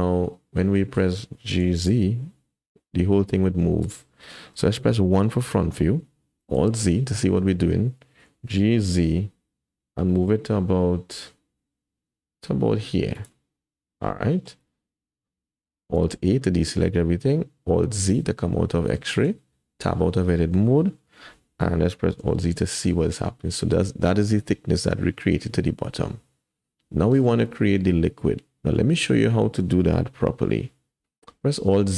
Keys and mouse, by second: 0.6 click, 1.6 g, 5.1 KP_1, 6.6 alt+z, 8.4 g, 13.5 click, 16.1 alt+a, 18.1 alt+z, 19.1 shift+click, 19.7 Tab, 21.2 KP_1, 22.3 alt+z, 26.7-27.2 drag, 28.7 shift+click, 31.6 alt+z.